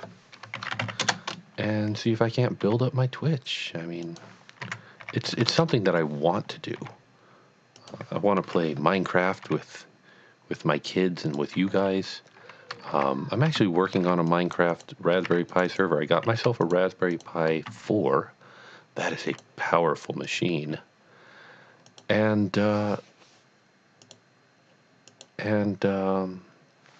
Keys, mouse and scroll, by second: 0.6 shift+e, 0.7 y, 1.0 Return, 1.9 scroll down 1, 2.7 g, 4.2 click, 4.6-6.8 typing, 5.7 KP_Enter, 7.8 click, 8.4 KP_1, 9.4 g, 11.3 click, 11.8 scroll up 1, 12.9 ctrl+r, 13.6 Tab, 14.0 ctrl+r, 14.3 click, 14.8 double click, 15.3 r, 15.5 click, 15.7 double click, 16.6 shift+click, 17.1 shift+double click, 17.8 s, 19.3 click, 20.2 click, 21.9 click, 24.0 click, 25.1 click.